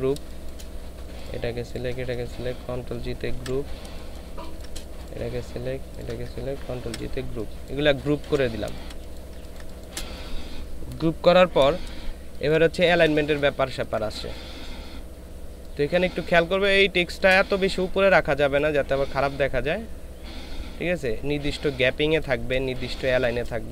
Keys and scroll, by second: 0.2 space, 3.3 ctrl+shift+g, 3.8 space, 5.3 ctrl+shift+space, 8.2 ctrl+z, 8.7 ctrl+space, 12.3 ctrl+space, 16.5 ctrl+space, 22.6 ctrl+space.